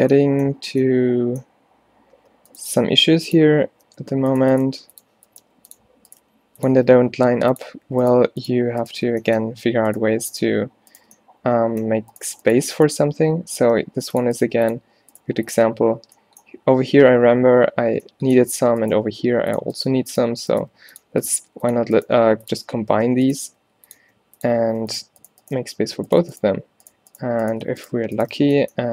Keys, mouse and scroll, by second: 2.9 e, 3.9-7.0 typing, 9.2 f, 13.7 v, 14.5 g, 15.3 g, 19.6-22.3 typing, 23.5 g, 24.1 e, 25.7 f, 27.7 f, 28.4 f.